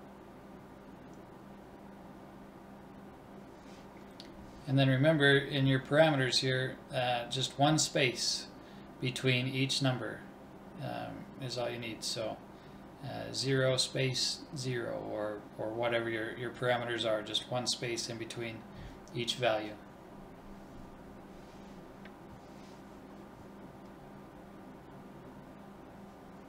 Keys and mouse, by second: 3.9 BackSpace, 10.5-13.8 drag, 12.9 KP_0, 14.7 BackSpace, 22.4-24.1 drag.